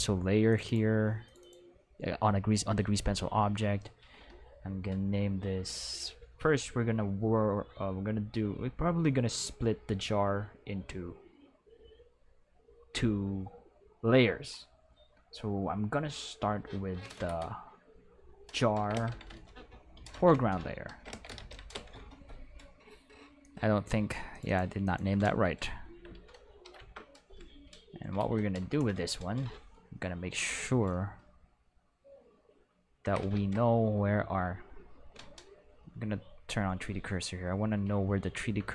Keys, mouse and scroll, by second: 0.4 click, 0.6 click, 1.2 click, 1.3 click, 18.7-21.3 typing, 21.7 Return, 23.4 click, 24.3 click, 24.4 click, 24.8 click, 25.8 Left, 26.6 shift+l, 26.7 Return, 33.3 shift+a, 35.1 Escape, 35.7 click, 36.5 click, 38.2 ctrl+middle drag.